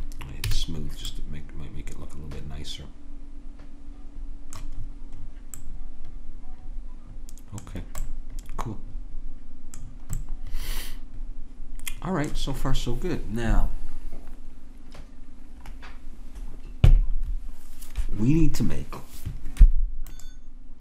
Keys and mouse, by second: 0.5 a, 0.7 click, 1.4-2.4 middle drag, 5.3-6.6 middle drag, 9.5-12.1 middle drag.